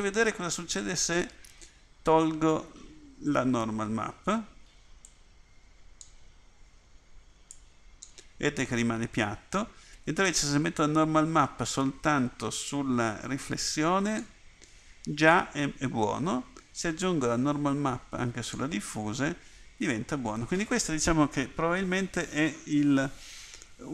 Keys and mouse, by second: 5.3 click, 7.8 click, 10.4-12.4 drag, 18.6 click, 18.8 middle click.